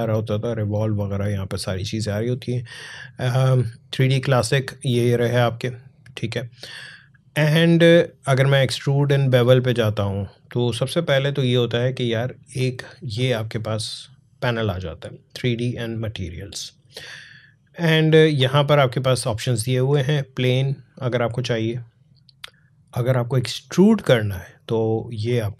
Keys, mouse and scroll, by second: 9.1-15.7 drag, 18.1 click, 23.6 click, 25.4-25.5 alt+scroll up 2.